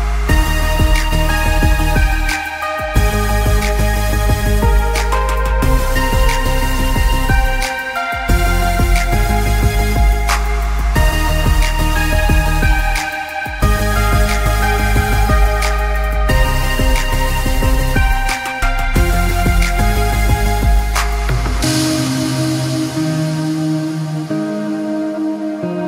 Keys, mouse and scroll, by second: 2.4 click, 15.2 click.